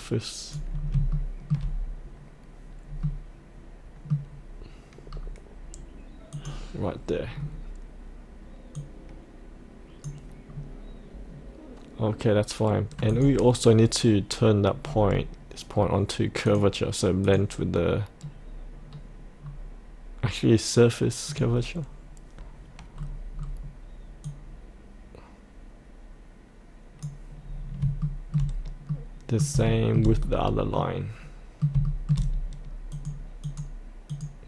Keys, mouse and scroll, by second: 0.8 scroll up 1, 1.1 shift+middle click, 3.0-4.3 middle drag, 5.1-6.3 scroll up 1, 6.3 click, 7.3-8.7 scroll down 1, 8.7-10.4 drag, 10.5-13.1 scroll up 1, 13.1 click, 14.8-16.4 scroll down 1, 16.4 click, 18.2-21.2 scroll down 1, 21.2 click, 22.9-24.2 scroll down 1, 24.2-27.4 drag, 27.4-27.8 scroll up 1, 28.0 shift+middle click, 28.9 middle click, 29.6 shift+middle click, 30.1-30.7 scroll down 1, 30.7 middle click, 31.8 shift+middle click, 32.9 click.